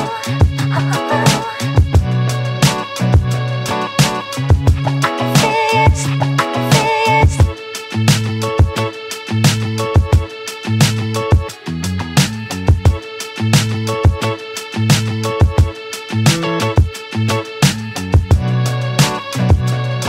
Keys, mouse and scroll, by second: 0.1 click, 0.4 right click, 2.6 click, 2.8 right click, 3.1 Tab, 3.3 alt+right click, 3.9 Tab, 4.2 alt+click, 4.6 Tab, 4.7 Tab, 5.1 click, 5.2-6.0 alt+drag, 6.4 alt+right click, 6.6-6.9 alt+drag, 6.9 alt+drag, 7.2 Tab, 7.4 Tab, 8.0 z, 8.3 click, 8.8 alt+click, 9.1 Tab, 9.3 Tab, 9.5 z, 9.8-10.1 right drag, 10.1 Tab, 10.4 click, 10.5 alt+click, 10.8 alt+right click, 11.0 alt+click, 11.7 click, 12.9 click, 13.0 click, 13.3 click, 13.8 alt+click, 14.4 alt+click, 14.6 alt+right click, 14.7 alt+middle click, 15.0 `, 15.3 scroll up 1, 15.4 alt+middle click, 15.7 shift+a, 16.8 scroll down 1, 17.0 alt+middle click, 17.5 g, 18.3 1.